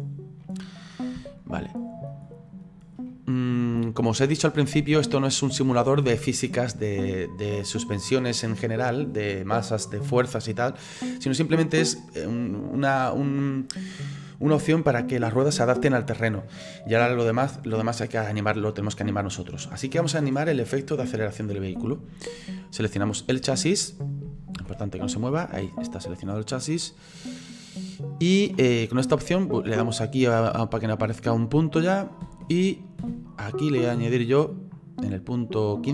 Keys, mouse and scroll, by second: 0.4-2.3 middle drag, 2.3-3.1 scroll up 6, 3.1-21.4 middle drag, 22.7 right click, 24.6 ctrl+z, 25.6-29.8 middle drag, 29.8 click, 32.2 space, 33.0 space, 35.8 click.